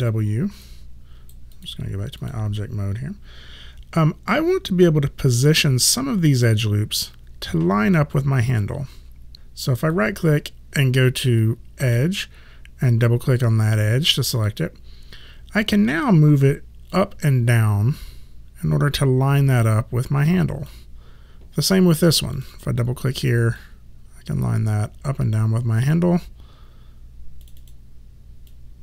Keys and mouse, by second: 0.7 right click, 1.6 click, 9.3 click, 10.0 right click, 14.2 click, 17.0 click, 22.4 click, 27.5 click.